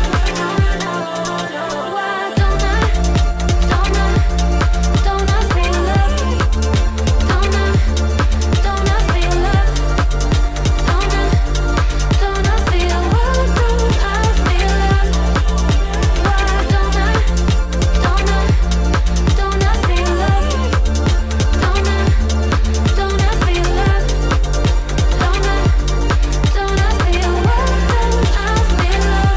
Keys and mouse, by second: 0.2 click, 0.9 click, 1.3 middle click, 3.5 Tab, 4.3 2, 5.0 shift+click, 5.4 shift+click, 5.8 shift+click, 6.2 shift+click, 6.7 shift+click, 7.5-9.8 drag, 10.8 click, 11.2 shift+click, 11.5 shift+click, 11.8 shift+click, 12.2 shift+click, 12.5 shift+click, 13.5 click, 14.5 Tab, 15.2-19.6 middle drag, 20.4-21.6 middle drag, 24.1 middle click, 25.3-28.5 middle drag, 28.5 click, 29.3 middle click.